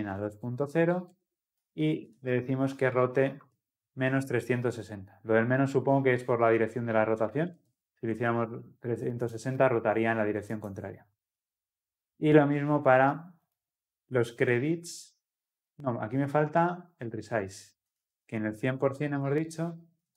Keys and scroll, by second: 7.6 ctrl+alt+l, 7.8 ctrl+alt+o.